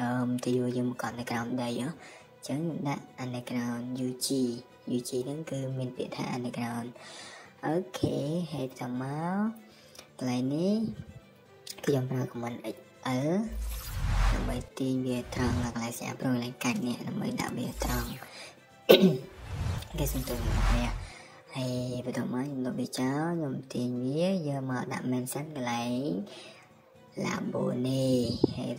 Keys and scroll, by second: 0.3-1.6 typing, 2.7-3.8 typing, 8.2 Escape, 9.9 Escape, 10.3-10.7 typing, 11.5 Escape, 11.7 Escape, 12.2 typing, 13.8 typing, 14.6 Escape, 15.0 Escape, 19.8 Escape, 20.0 Escape, 21.2 e, 21.4 space, 21.4 Escape, 22.9 m, 24.1 typing, 28.3 Escape.